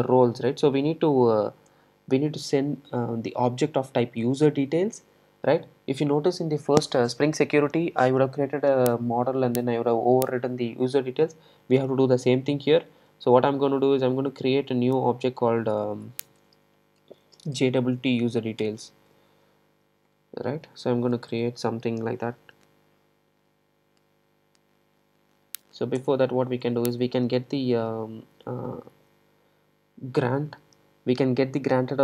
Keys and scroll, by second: 13.2 super+c, 20.1 super+v.